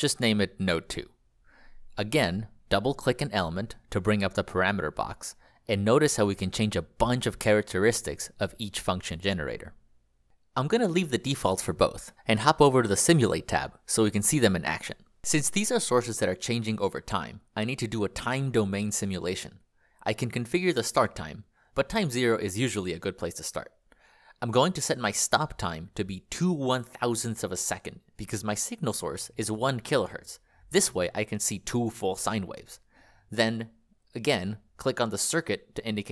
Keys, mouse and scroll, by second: 0.2 Return, 1.4 click, 10.6 click, 23.5 2, 34.8 click.